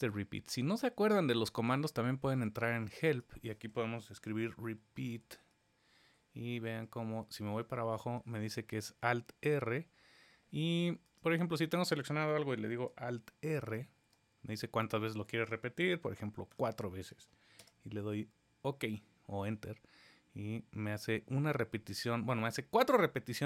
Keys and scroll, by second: 13.6 alt+r.